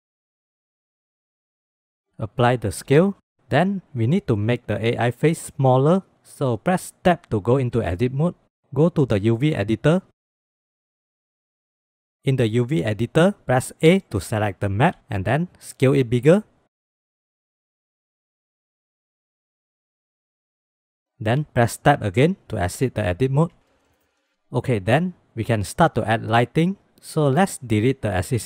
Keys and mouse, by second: 2.3 ctrl+a, 7.1 Tab, 9.3-10.6 drag, 11.6 click, 12.1 a, 13.9 a, 15.8 s, 19.3 s, 20.3 shift+click, 21.9 Tab, 23.1 shift+click, 23.6 shift+click, 23.8 drag, 24.0 shift+click, 27.0 click, 27.7 x.